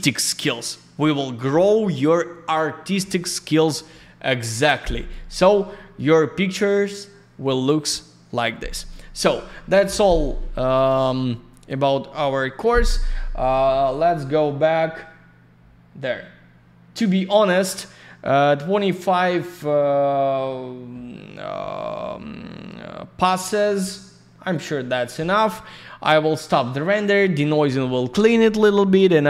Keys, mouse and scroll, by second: 4.2 click, 5.9 click, 8.3 click, 11.5 click, 11.7 click, 12.9 scroll up 1, 15.5 scroll down 1, 19.5 scroll up 1, 20.3 scroll down 1, 24.4 click.